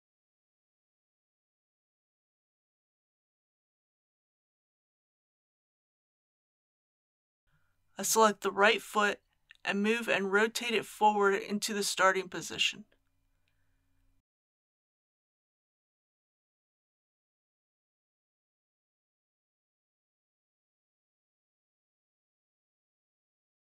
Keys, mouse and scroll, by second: 0.4 ctrl+z, 0.7 g, 4.0-5.1 drag, 16.5 KP_3, 18.9 r, 22.0 click, 22.7 ctrl+z.